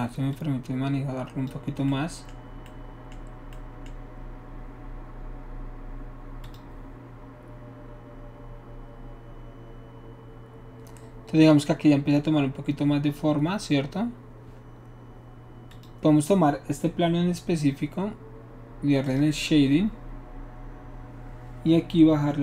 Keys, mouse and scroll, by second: 0.3-1.5 drag, 6.5 click, 15.7 click, 19.1 click.